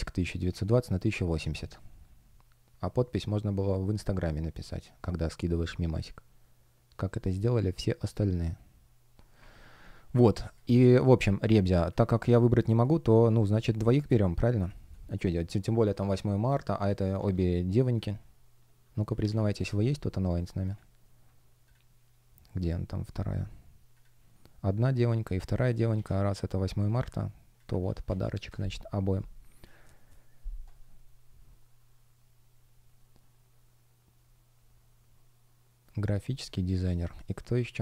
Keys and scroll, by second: 12.5 space, 13.9 space, 17.0 super+c, 19.1 super+v, 19.5 Return, 25.8 super+c, 27.7 super+e, 27.9 super+v, 28.3 Return.